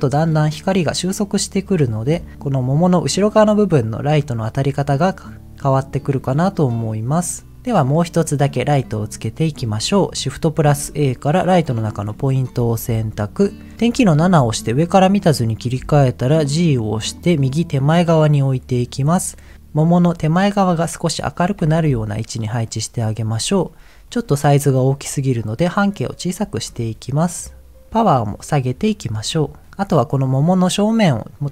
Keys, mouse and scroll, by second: 3.8-7.5 drag, 7.9 middle click, 10.5 shift+a, 13.8 KP_7, 15.7 g, 17.1 click, 18.2 middle click, 20.8 middle click, 21.5 g, 21.7 z, 22.6 click, 25.8 click, 26.7-27.8 shift+drag, 28.3 click, 29.4 shift+click.